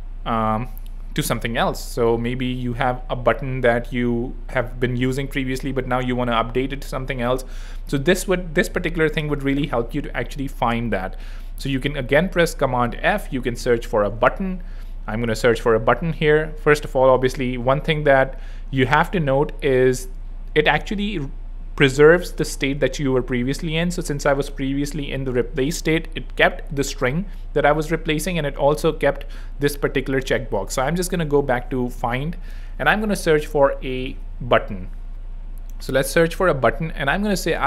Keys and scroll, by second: 11.9 super+f, 13.2-14.5 typing, 32.7 super+a, 32.9-34.1 typing, 35.7-36.5 typing.